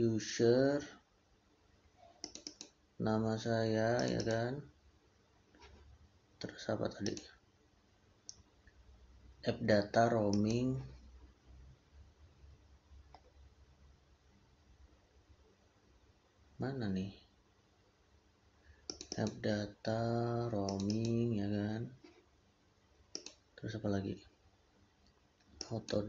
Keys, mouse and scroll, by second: 2.1 click, 3.9 click, 6.9 click, 18.7 click, 23.0 click.